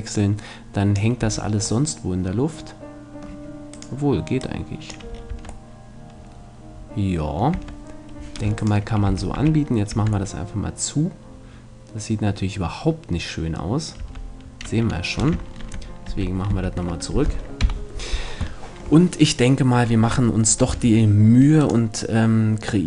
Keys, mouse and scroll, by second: 1.2 a, 1.6-2.6 middle drag, 2.9 middle click, 3.1 middle click, 3.2 middle click, 3.7-5.5 right drag, 4.4-5.5 drag, 5.1 middle click, 5.3 Tab, 5.5 middle click, 7.5 Tab, 8.6-9.9 right drag, 9.1 f, 9.4 a, 9.9 Tab, 14.0 Tab, 15.6 ctrl+z, 16.1 ctrl+z, 16.5 ctrl+z, 17.6 KP_1, 18.6-19.9 middle drag, 20.8 a, 21.6-22.8 right drag.